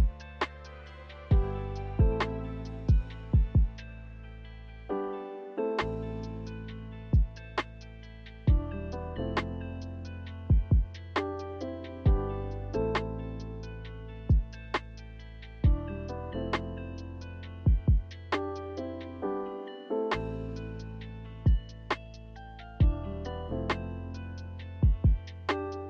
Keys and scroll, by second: 0.8 a, 3.0 ctrl+z, 8.7 n, 12.1 a, 21.5 b.